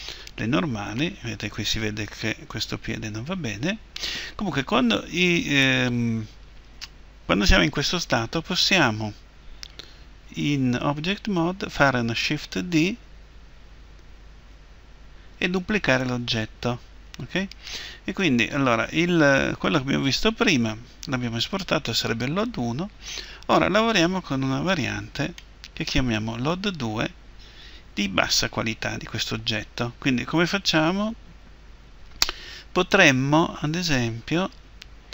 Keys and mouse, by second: 14.4 shift+d, 17.3-20.4 drag, 25.4-27.7 drag.